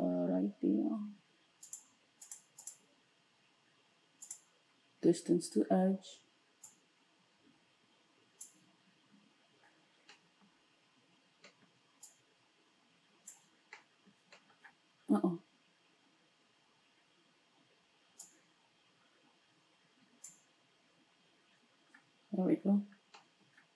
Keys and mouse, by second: 1.6 click, 2.4 middle click, 2.7-23.7 drag.